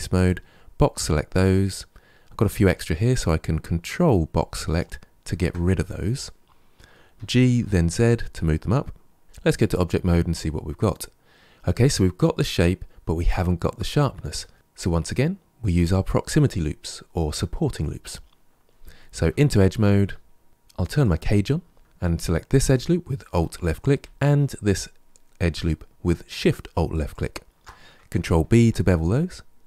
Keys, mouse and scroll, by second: 3.7 ctrl+click, 7.0 g, 9.2 Tab, 9.4-12.4 middle drag, 19.1 2, 20.9 click, 22.5 alt+click, 26.9 alt+shift+click, 28.3 ctrl+b.